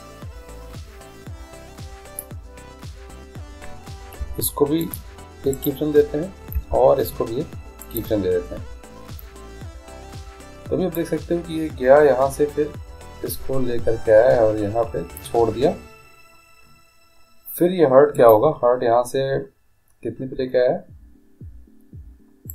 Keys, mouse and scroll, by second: 4.3 i, 5.6-7.5 right drag, 6.6 i, 11.0-12.9 drag, 18.2-20.0 right drag.